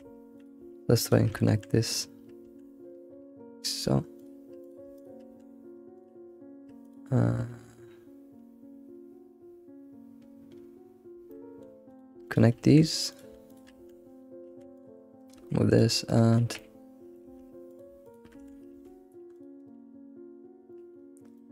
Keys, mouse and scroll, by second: 0.3 click, 1.0 shift+click, 1.3 2, 2.4 1, 3.7 click, 4.2 shift+click, 4.6 click, 4.9 shift+click, 5.3 1, 5.9 click, 6.8 click, 11.3 middle click, 11.9 click, 12.2 shift+click, 12.7 2, 13.1 click, 13.5 shift+click, 13.7 1, 14.5 Tab, 14.6 Tab, 14.7 click, 15.0 scroll down 1, 15.2 right click, 15.8 click, 16.2-16.5 right drag, 16.5-17.3 middle drag, 17.3 Tab, 17.3 Tab, 17.7 click, 18.0 shift+click, 18.4 2, 18.7 Tab, 19.3 click, 19.6-20.6 right drag, 20.6 scroll down 1, 20.7 middle click, 21.4 middle click.